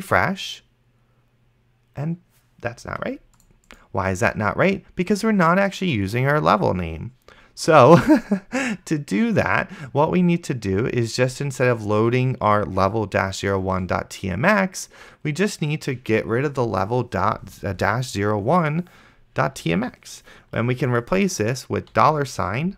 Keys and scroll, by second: 22.2-22.7 typing.